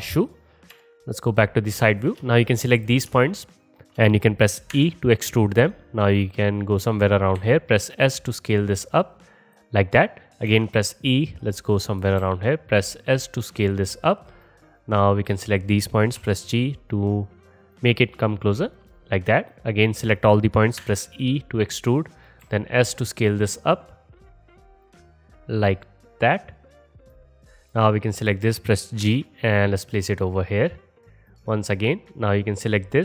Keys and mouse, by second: 0.8 KP_1, 2.4-2.9 drag, 4.8 e, 6.8 click, 7.1-14.5 middle drag, 7.4 s, 10.5 e, 12.2 s, 14.5-18.9 drag, 16.2 g, 20.8 e, 22.3-27.7 drag, 22.5 s, 27.7 click, 29.1 g, 31.3 middle click.